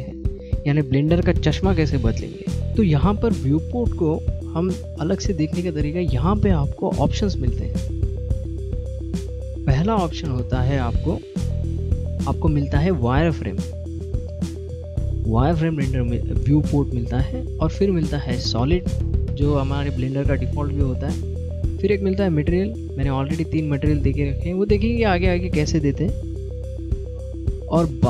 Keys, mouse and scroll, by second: 1.0 middle click, 4.0 middle click, 11.5 click, 12.7 middle click, 18.2 click, 19.0 middle click, 21.7 click, 22.9 middle click, 26.6 middle click.